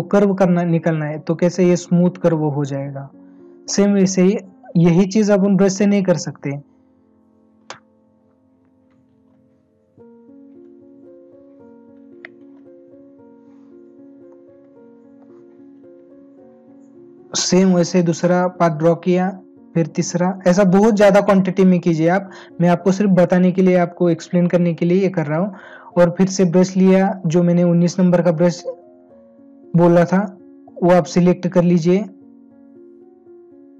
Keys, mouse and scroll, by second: 14.3 space.